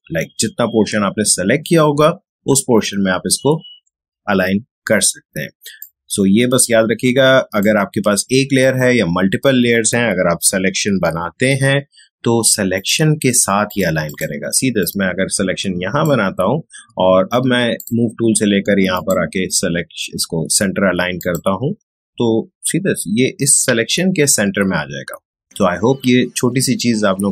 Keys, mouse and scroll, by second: 5.8-11.3 drag, 11.3 ctrl+;, 12.7-17.7 drag.